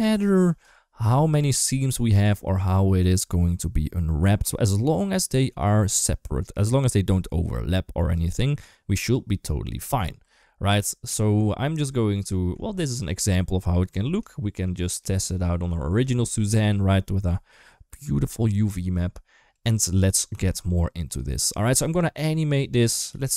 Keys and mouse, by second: 10.1 Tab, 10.6 shift+middle click, 12.1 shift+middle click, 13.7 Tab, 14.2 shift+middle click, 15.1 shift+middle click, 16.0 shift+middle click, 16.4 Tab, 18.6 Tab, 20.1 g, 22.9 g.